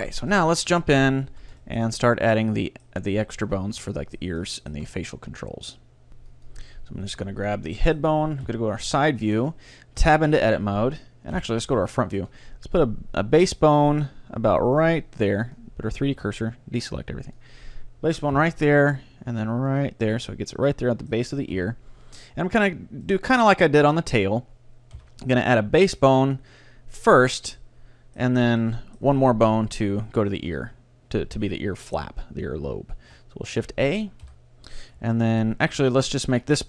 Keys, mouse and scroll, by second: 1.3 a, 3.9-6.2 middle drag, 7.1 right click, 7.5 middle click, 8.5 KP_3, 8.9-10.9 middle drag, 10.1 Tab, 11.4 KP_1, 12.0-13.9 middle drag, 14.9-19.3 drag, 16.2 a, 18.4 KP_3, 19.9-21.3 drag, 20.1-21.3 middle drag, 21.6 KP_1, 22.8-27.5 middle drag, 25.0 KP_1, 28.5 middle click, 28.7 middle click, 28.9 middle click, 29.1-30.2 middle drag, 33.1 shift+a, 34.3 KP_1, 35.1 g.